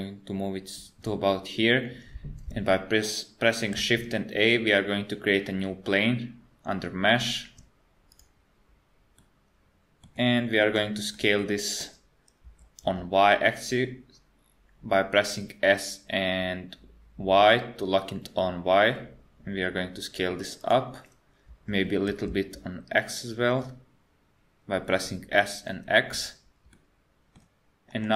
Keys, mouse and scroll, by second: 3.8 shift+a, 9.2 middle click, 10.7 KP_1, 11.2 middle click, 12.5 s, 21.5 s, 26.8 middle click, 27.9 KP_1.